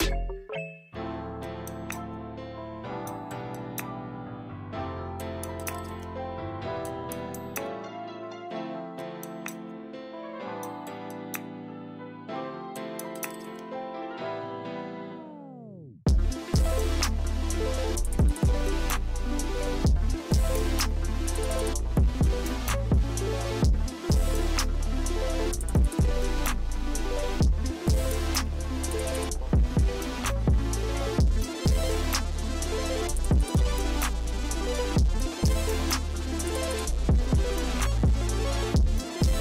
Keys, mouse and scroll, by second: 2.1 click, 2.5 scroll down 2, 3.6 g, 5.3 KP_0, 6.4 g, 9.6 click, 10.6 shift+right click, 10.8 shift+a, 14.7 KP_3, 15.6 g, 18.2 KP_0, 19.6-20.7 drag, 20.7 0, 22.3-23.8 drag, 23.8 0, 25.1 g, 28.9 click, 29.3-31.1 drag, 31.1 0, 34.2 ctrl+c, 34.5 ctrl+v, 34.6 g, 36.1 g.